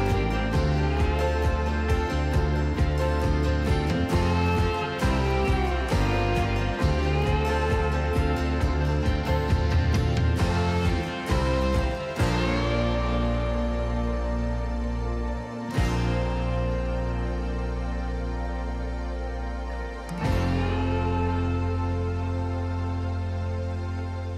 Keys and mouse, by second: 0.2 x, 1.5 y, 6.5 click, 8.3-9.1 drag, 9.1-10.1 middle drag, 11.2 click, 12.2 g, 12.6 y, 14.7 click, 15.6-16.8 drag, 17.4 KP_3, 21.1-21.7 middle drag.